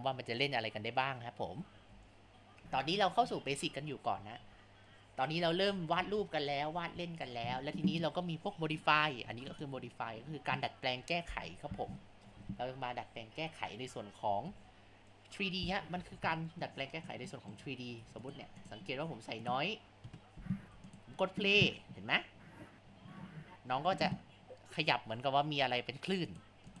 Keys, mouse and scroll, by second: 1.3 click, 2.1 ctrl+alt+click, 4.9 click, 6.0 ctrl+z, 6.5 click, 7.4 ctrl+z, 9.5 click, 11.6 click, 12.5 ctrl+z, 13.2-14.2 drag, 14.5 ctrl+z, 15.1 click, 16.0 ctrl+z, 16.6-17.7 middle drag, 18.6-19.5 drag, 20.3 KP_0, 20.7 Tab, 21.5 space, 25.6 space, 26.3-26.8 drag.